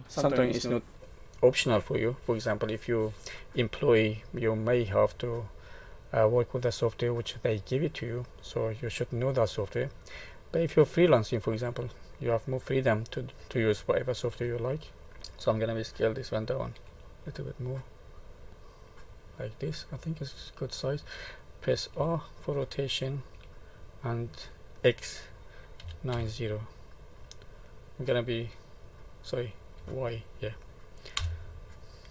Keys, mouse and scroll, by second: 6.5 middle click, 14.7 shift+middle click, 15.1 middle click, 15.1-15.4 scroll up 1, 16.7 s, 18.5 middle click, 21.9 r, 31.8 middle click.